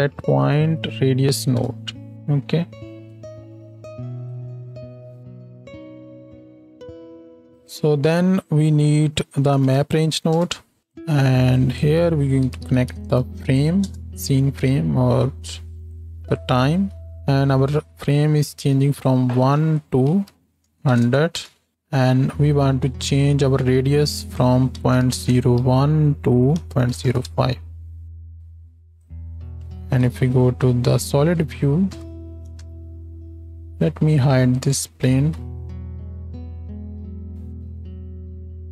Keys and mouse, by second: 0.2 BackSpace, 2.1-3.6 drag, 5.2 click, 5.9 g, 6.3 click, 7.5 shift+a, 10.9 click, 15.9 click, 16.7 ctrl+h, 16.9-19.0 drag, 21.0 KP_0, 29.7 z, 31.8 KP_7, 32.6 shift+Left, 35.7 shift+Left, 36.0 space.